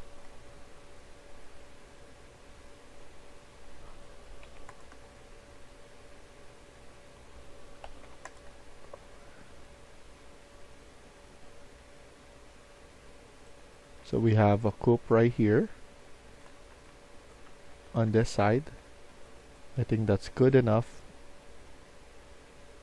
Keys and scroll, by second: 4.2-4.9 typing, 7.5-8.4 typing, 13.5-19.1 typing.